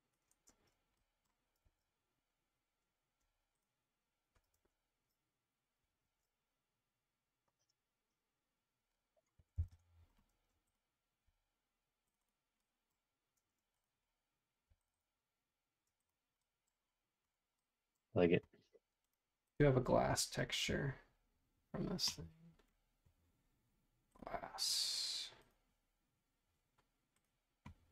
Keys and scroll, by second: 0.5 space, 1.6 super+z, 3.2 f, 4.5 super+Tab, 5.1 super+Tab, 6.0 super+Tab, 9.1-11.2 typing, 13.6 space, 14.7 f, 15.8 space.